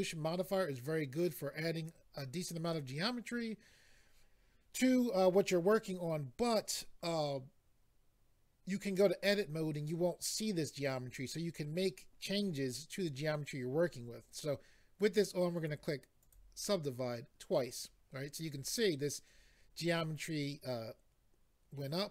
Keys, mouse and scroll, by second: 15.5 click, 16.2 click, 20.2 middle click.